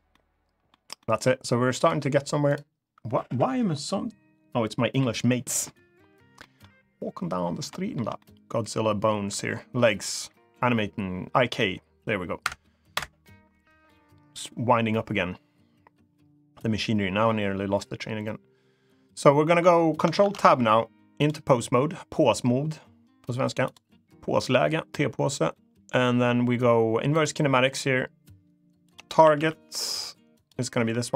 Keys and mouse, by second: 0.7 middle click, 1.6 click, 1.8 g, 2.2 click, 6.1 middle click, 7.4 shift+middle click, 7.9 middle click, 8.4 middle click, 12.1 F2, 19.9 ctrl+Tab, 24.0-26.9 drag, 28.6-29.6 drag, 30.1-31.1 drag.